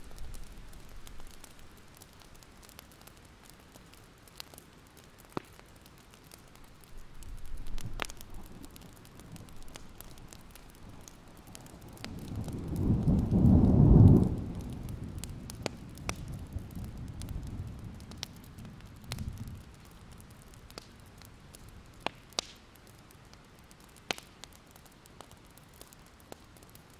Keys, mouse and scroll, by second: 0.9 click, 1.4-2.6 scroll up 1, 4.8 ctrl+z, 5.1-5.4 alt+scroll down 2, 5.5-6.5 alt+scroll up 1, 6.6-7.6 alt+scroll up 1, 7.6 click, 10.1 click, 13.4-13.9 scroll up 1, 14.0 ctrl+z, 15.3 click, 18.4-19.1 scroll down 1, 19.1 click, 22.2-22.7 scroll down 1, 22.7 click, 23.1 alt+click, 23.7 click, 24.2 ctrl+z, 24.7-26.9 alt+drag.